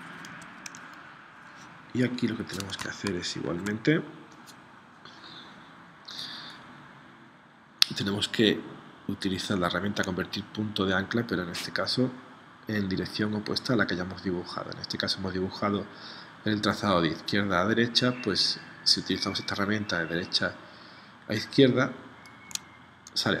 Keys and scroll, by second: 0.3 Escape, 3.0 shift+c.